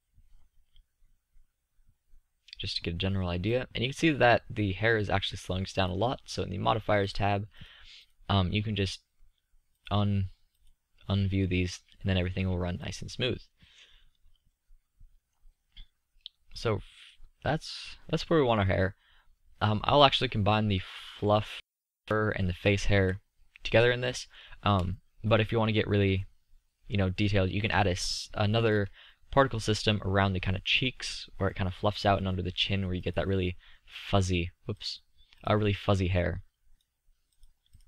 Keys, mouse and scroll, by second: 5.6-8.2 middle drag, 22.6 z, 33.0-37.0 drag.